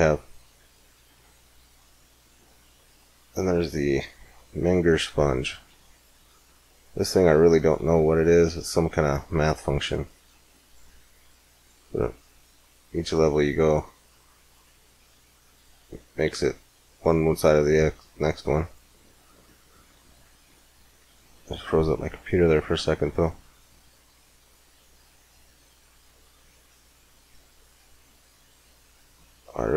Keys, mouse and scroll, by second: 3.4-7.9 middle drag, 9.1 click, 17.7-19.4 drag, 19.4 middle click, 20.0-22.8 middle drag, 23.5-29.7 drag.